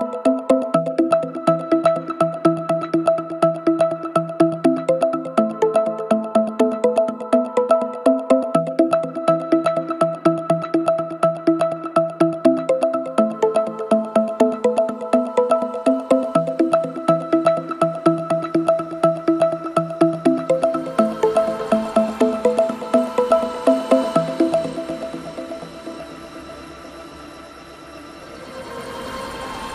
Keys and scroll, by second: 8.6 ctrl+z.